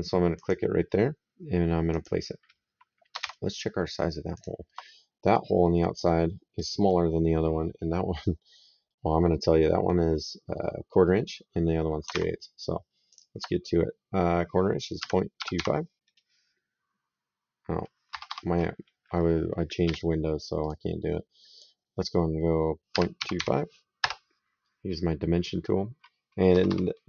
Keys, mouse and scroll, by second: 0.2 click, 1.7 click, 3.1 alt+Tab, 4.2 alt+click, 12.1 alt+Tab, 12.9 alt+click, 14.8 KP_Decimal, 15.2 KP_2, 15.4 KP_5, 17.9 Escape, 19.7 d, 20.5 click, 22.8 KP_Decimal, 23.0 KP_2, 23.9 Return, 23.9 KP_Enter, 26.3 Escape.